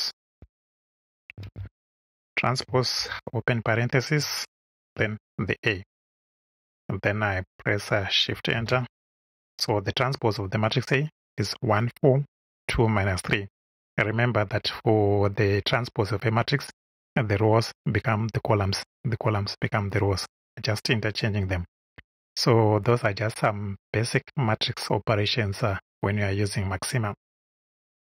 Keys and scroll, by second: 0.0-1.5 typing, 2.6 shift+e, 2.9 shift+9, 4.7 shift+a, 8.5 shift+Return.